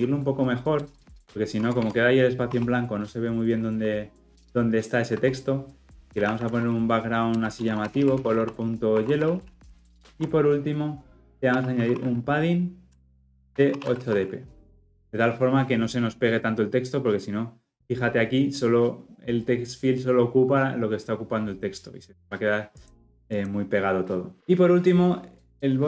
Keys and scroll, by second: 1.6 Tab, 7.3 Return.